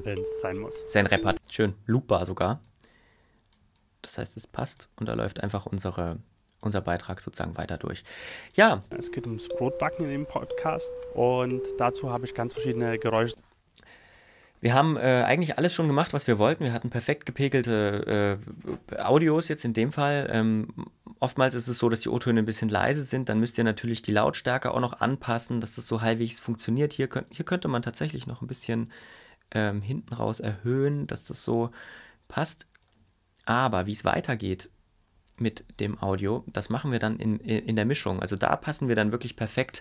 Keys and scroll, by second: 1.3 space, 8.8 space, 13.3 space.